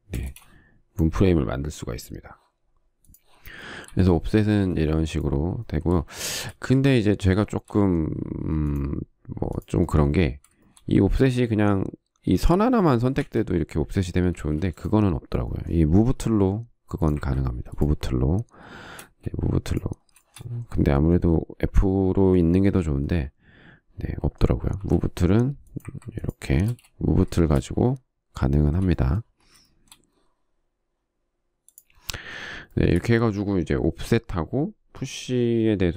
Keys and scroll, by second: 0.9 space, 14.1 f, 15.2 space, 16.9 m, 20.0 space, 25.7 m, 27.6 ctrl+space.